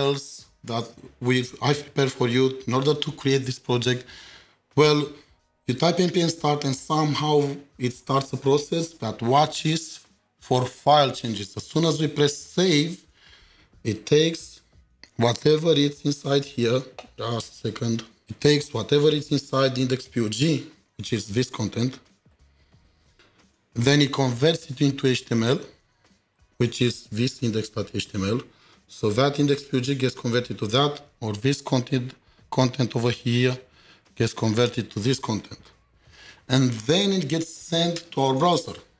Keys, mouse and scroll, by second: 15.8 ctrl+shift+4, 17.7 ctrl+shift+4, 17.8 ctrl+shift+7, 18.2 ctrl+shift+2, 19.1 ctrl+shift+4.